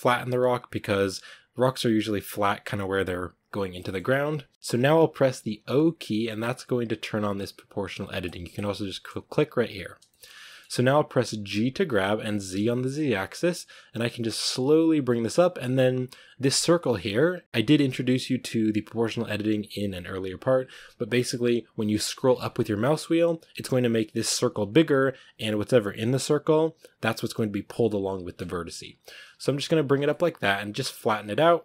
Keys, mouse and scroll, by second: 0.9-2.0 scroll down 1, 2.0-3.6 scroll up 1, 3.6 middle click, 4.5 o, 4.8 o, 5.5 o, 8.1-10.0 drag, 10.0-11.4 shift+middle drag, 11.4 g, 29.8 Tab, 30.0-31.1 middle drag, 31.1 Tab, 31.5 right click.